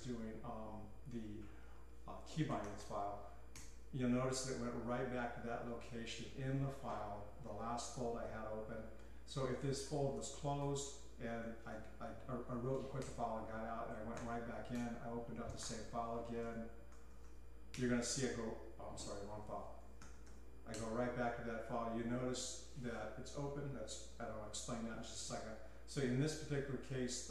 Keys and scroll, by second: 0.0-0.6 typing, 2.3-3.6 typing, 5.5-6.2 typing, 9.7-11.7 typing, 13.0 Return, 13.5 Escape, 14.2 k, 14.8 Return, 15.3-17.7 typing, 19.0-20.8 typing, 26.7-27.3 typing.